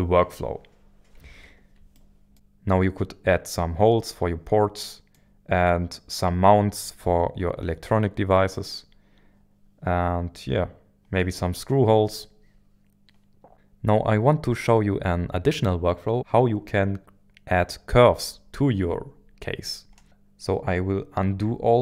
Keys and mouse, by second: 1.9 shift+middle click, 4.8-11.3 middle drag, 12.1-13.5 middle drag, 21.3 ctrl+z, 21.6 ctrl+z.